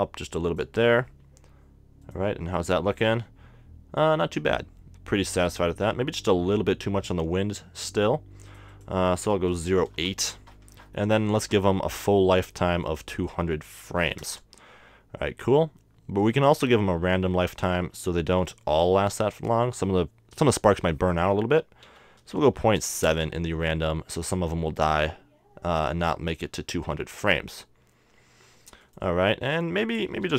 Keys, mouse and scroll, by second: 0.5-3.8 drag, 5.9-7.8 middle drag, 8.4-10.2 drag, 10.7-13.5 middle drag, 12.9-14.6 drag, 14.2 0, 17.6-19.3 drag, 28.8-30.3 drag.